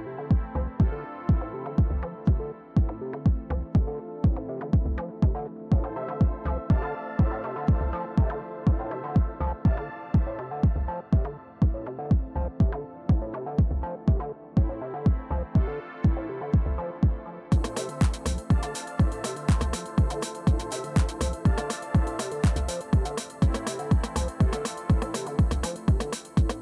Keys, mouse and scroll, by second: 0.0-1.3 typing, 2.4 right click, 3.1 click, 3.1 typing, 5.3-6.4 drag, 7.6-10.0 typing, 11.6-16.4 typing, 16.9 Return, 18.2-21.6 typing, 25.4 Return.